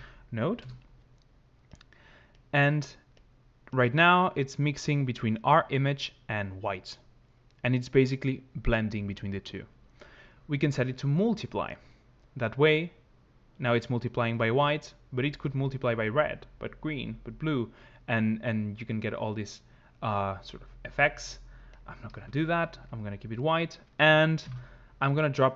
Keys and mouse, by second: 3.1 click, 4.2 click, 10.5 click, 12.3 click, 21.5 click, 21.9 ctrl+z, 22.5 ctrl+z, 24.2 shift+a.